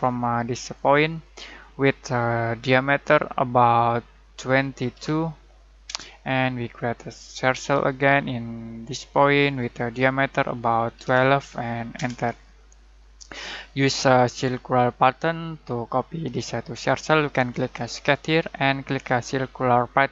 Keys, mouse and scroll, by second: 0.7 click, 4.3-8.0 typing, 9.4 click, 10.6-11.4 typing, 11.9 Return.